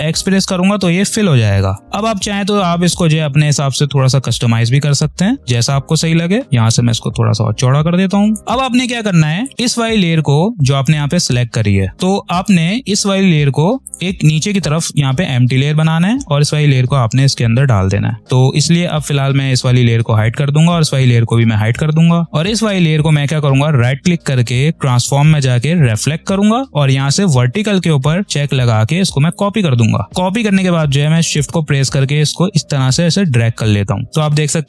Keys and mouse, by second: 0.0 shift+x, 1.8-8.4 ctrl+drag, 8.4 v, 8.9-11.9 drag, 13.8-18.2 drag, 18.4 click, 23.2 right click, 25.8 click, 29.1 click, 31.1-34.6 drag.